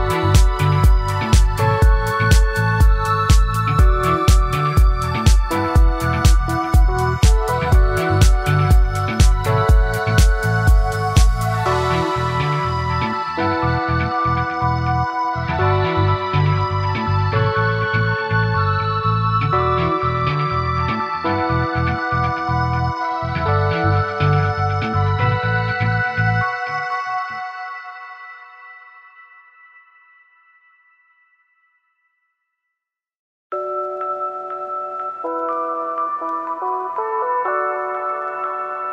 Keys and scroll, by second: 3.3 ctrl+z.